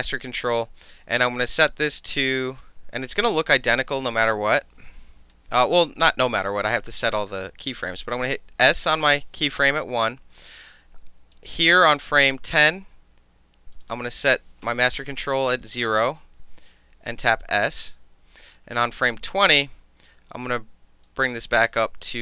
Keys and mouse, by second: 2.1 click, 3.3 click, 4.2 KP_1, 4.5 KP_0, 4.8 KP_Enter, 8.1 s, 10.5-11.3 drag, 13.7 click, 14.4 KP_0, 14.6 KP_Enter, 15.6 alt+middle click, 17.3 s, 19.3 click, 21.1-21.6 drag.